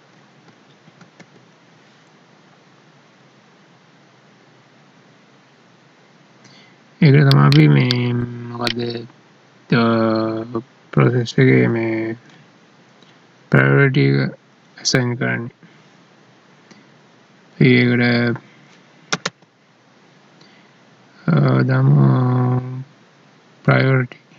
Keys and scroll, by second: 1.0 ctrl+s.